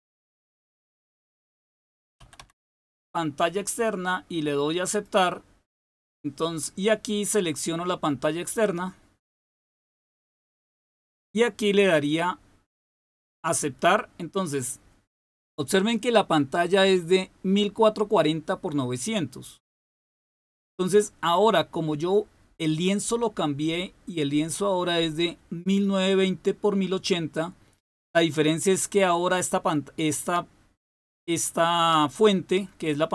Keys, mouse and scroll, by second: 0.0-3.3 typing, 4.8 click, 7.4 click, 8.6 click, 19.9 click.